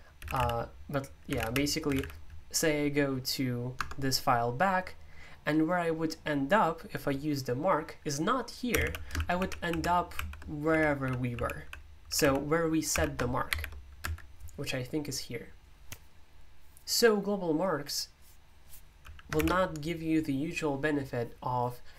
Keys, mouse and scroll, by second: 0.2-2.4 typing, 3.7 typing, 8.7-14.5 typing.